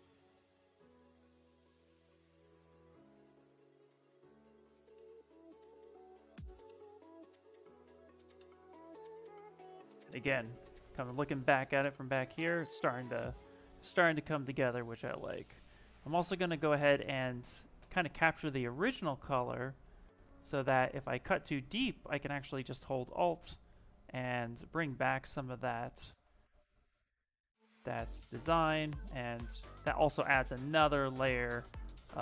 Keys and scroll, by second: 3.0 s, 5.5 s, 14.8 v, 15.4 c, 17.5 c, 18.0 v.